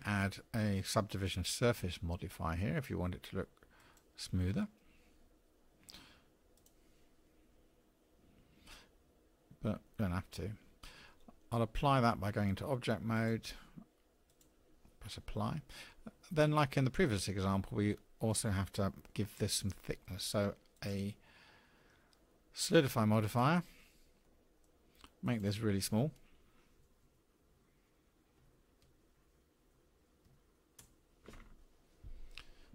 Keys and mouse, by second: 6.5 click, 9.8 middle click, 10.8 Tab, 13.1-14.4 drag, 19.1-20.0 middle drag, 24.3 middle click, 25.3-32.3 drag.